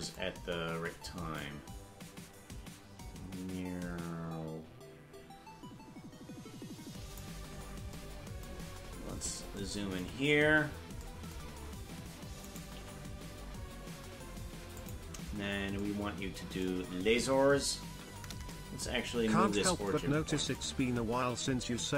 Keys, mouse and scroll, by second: 1.4-7.2 drag, 7.5 scroll up 6, 8.8-9.5 scroll up 8, 10.3-11.0 scroll up 4, 12.4 right click, 12.8 g, 17.9 KP_Decimal, 19.0-19.9 scroll down 6.